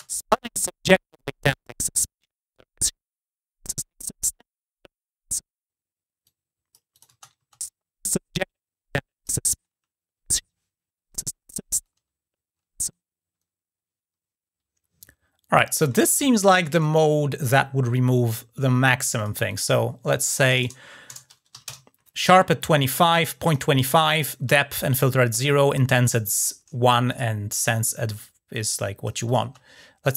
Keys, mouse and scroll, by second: 1.5-3.7 drag, 6.0 click, 6.7 click, 8.7-9.0 drag, 18.8 click, 18.9 click, 19.3 click, 23.2 click, 26.9 click, 28.3 click, 29.0 click.